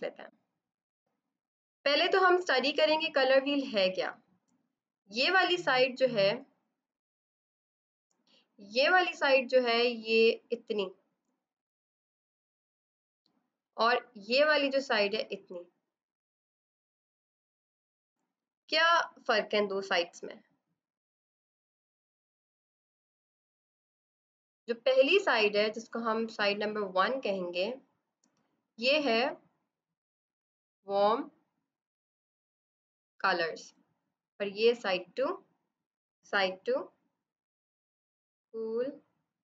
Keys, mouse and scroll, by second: 3.7 click, 7.6 click, 12.1 click, 22.2 right click, 23.0 click, 34.2 click.